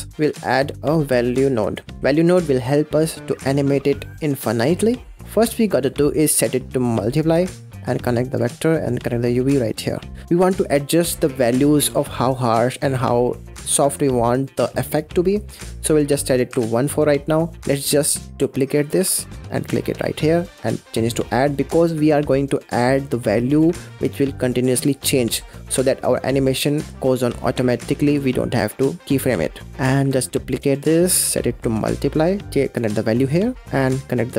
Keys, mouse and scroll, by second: 3.6 middle click, 4.4 click, 4.8 click, 5.1-6.1 middle drag, 6.1-7.7 drag, 8.9 click, 9.7-10.0 scroll down 3, 10.0 middle click, 10.2 click, 10.9 click, 15.4-16.7 drag, 17.1 middle click, 17.3 scroll down 6, 17.7 middle click, 18.1 click, 18.6 click, 18.9 shift+d, 20.3-21.8 drag, 21.8 middle click, 22.2-22.8 scroll up 2, 22.8 click, 27.9 click, 29.7 click, 29.9 shift+d, 31.1-32.5 drag, 33.4 click.